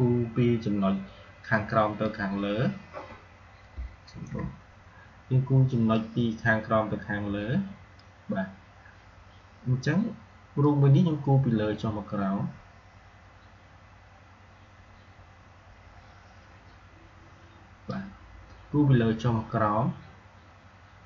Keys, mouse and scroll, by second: 4.0 ctrl+z, 5.8-10.3 drag, 10.5-20.4 drag.